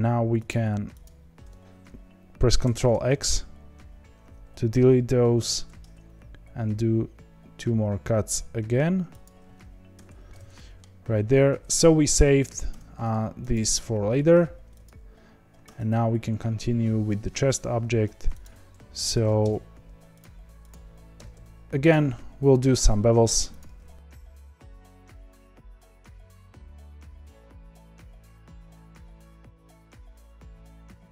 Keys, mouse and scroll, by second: 0.4 alt+shift+click, 2.3 alt+shift+click, 2.6 ctrl+x, 5.3 ctrl+r, 10.5-12.6 middle drag, 12.6 Tab, 13.5 click, 14.8 click, 15.6 Tab, 17.8 1, 18.4 click, 19.1 ctrl+b, 20.7 click, 21.2 g, 23.3 2, 24.0 click, 24.4 ctrl+b, 25.1-28.0 typing, 25.2 click, 25.9 click, 26.5 click, 27.0 click, 28.1 middle click, 28.5 click, 28.7 ctrl+b, 29.8 1, 29.9 click, 30.0 g, 30.6 click, 30.7 ctrl+b.